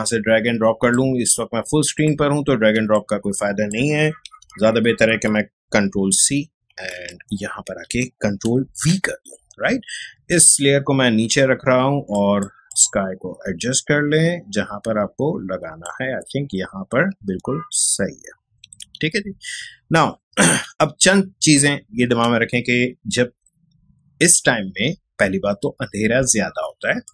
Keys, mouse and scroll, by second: 2.7 space, 2.9 click, 4.4 ctrl+a, 6.1 ctrl+c, 6.9 ctrl+Tab, 8.7 ctrl+v, 10.3 click, 10.5-17.4 drag, 17.4 Up, 27.0 click.